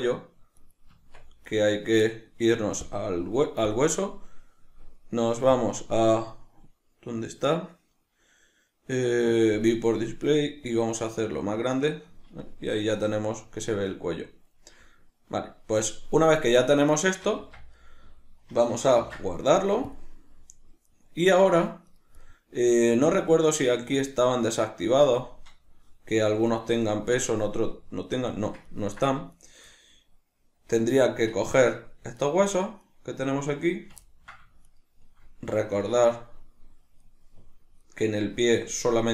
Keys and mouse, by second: 0.0 right click, 0.6 right click, 0.9 Tab, 1.5 right click, 2.9-4.4 drag, 4.4-5.5 middle drag, 5.5-12.4 drag, 12.4-21.9 middle drag, 17.4 Tab, 19.0 ctrl+s, 21.9 right click, 22.3-24.1 middle drag, 23.2 Tab, 24.1 right click, 24.8 Tab, 26.5 right click, 26.9-29.4 shift+middle drag, 29.4 shift+right click, 29.7-32.2 middle drag, 32.2 shift+right click, 32.9 shift+right click, 34.1-34.7 ctrl+middle drag, 34.7 shift+right click, 35.9 shift+right click, 37.1 shift+right click, 37.9 shift+right click, 38.2 shift+right click.